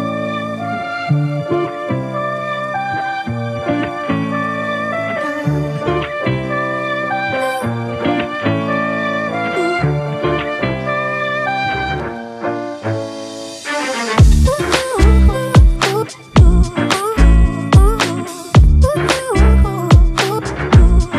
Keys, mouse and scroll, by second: 7.6 typing.